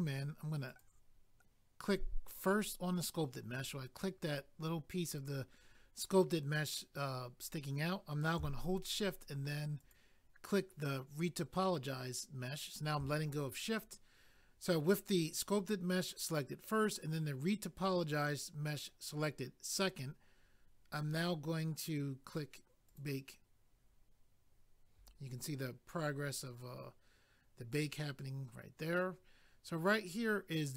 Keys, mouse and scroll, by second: 0.7 click, 0.8 click, 1.8 click, 2.0 click, 9.8 shift+click, 9.9 shift+click, 22.9 click, 23.0 click, 29.8 scroll down 1.